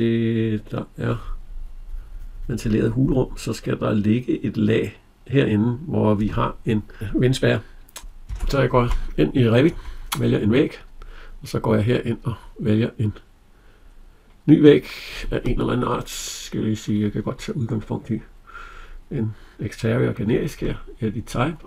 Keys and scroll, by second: 8.1 alt+Tab.